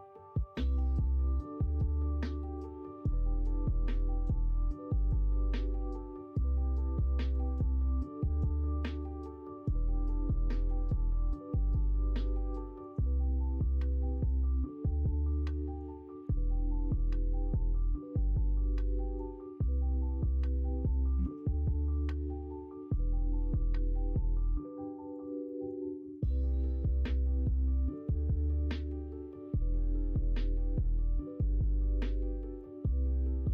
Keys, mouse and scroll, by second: 3.0-4.9 middle drag, 7.2 ctrl+r, 9.2 middle click, 10.0 middle click, 10.6 ctrl+r, 11.6 middle click, 12.6 middle click, 13.1 middle click, 13.9 shift+middle click, 14.5 middle click, 15.5 middle click, 16.0 shift+middle click, 16.9 click, 17.5 shift+click, 18.2 shift+click, 18.7 shift+click, 19.6 f, 19.7 middle click, 20.1 middle click, 20.7 shift+middle click, 21.2 ctrl+z, 21.5 middle click, 22.2 middle click, 23.1 s, 25.4 scroll up 1, 25.4 middle click, 25.6 scroll down 1, 26.2 f, 26.6 middle click, 27.7 click, 28.3 shift+click, 29.7 f, 30.1-32.5 middle drag, 33.3 ctrl+z.